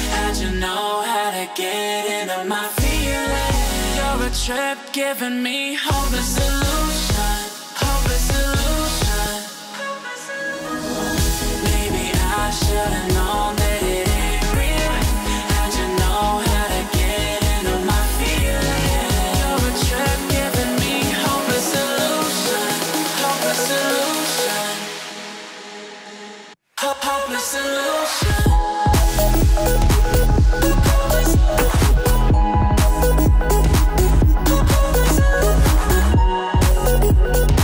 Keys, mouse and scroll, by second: 2.0-2.4 alt+scroll down 2, 2.4-3.1 alt+scroll up 2, 3.1-3.9 alt+scroll up 1, 3.9-4.3 alt+scroll down 2, 4.3-5.1 alt+scroll up 2, 5.1 click, 7.1 F7, 8.3-10.7 drag, 17.9 alt+scroll down 1, 18.2-18.7 alt+scroll up 1, 19.7 click, 21.7 right click, 23.6 click, 29.4 click, 31.3 Down.